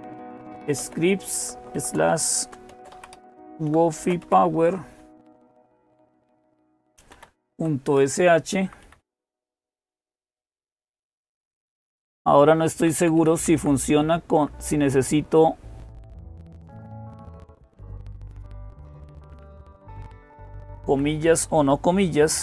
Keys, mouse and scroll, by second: 0.0-4.5 typing, 5.8-9.3 typing, 9.4 Delete, 9.5 Delete, 10.0 Delete, 10.1 Delete, 12.6 Delete, 12.8 Delete, 13.4 Delete, 14.1 Delete, 18.8 BackSpace, 19.4-20.7 Left, 20.9 Left, 22.1 shift+'.